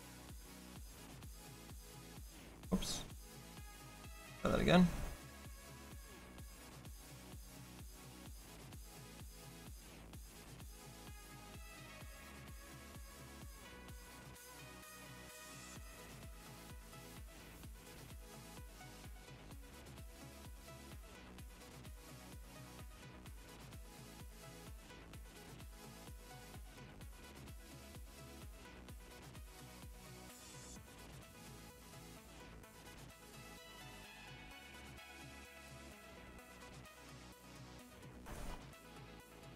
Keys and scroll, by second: 2.6 ctrl+z, 31.4 F4.